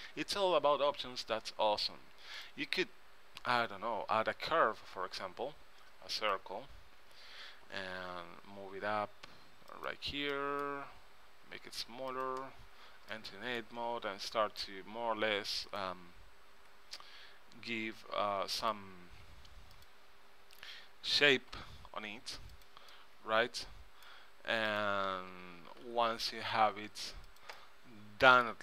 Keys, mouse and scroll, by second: 2.5-4.4 drag, 7.9 g, 11.3 s, 13.0 Tab, 15.8-16.9 right drag, 16.7 g, 16.9 click, 19.9-21.7 drag, 21.7 g, 23.0 middle click, 24.2 middle click, 24.8 click, 25.0 click, 25.9 g, 26.5 click, 28.0 middle click.